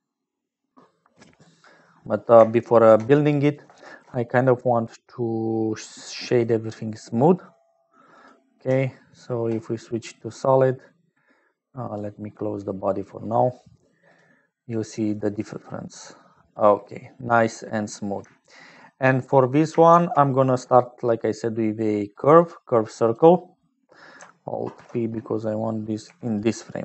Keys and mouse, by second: 0.0-26.8 typing, 3.5 click, 12.2 click, 14.0 click, 14.5 click, 15.1 click, 15.5 click, 15.8 click, 17.0 middle click, 18.6 shift+click, 24.7 alt+p.